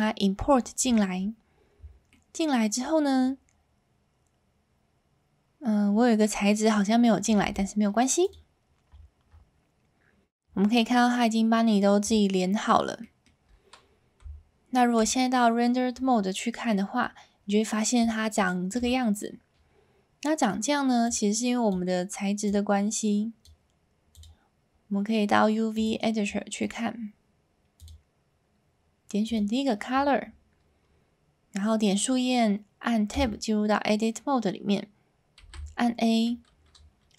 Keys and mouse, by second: 6.4 middle click, 7.4 g, 10.8 middle click, 13.1 middle click, 14.2 z, 16.7-17.0 middle drag, 18.4 shift+middle drag, 21.1 click, 22.4 click, 24.1-25.9 drag, 26.6 middle click, 27.7-29.3 drag, 33.2 Tab, 35.4 a.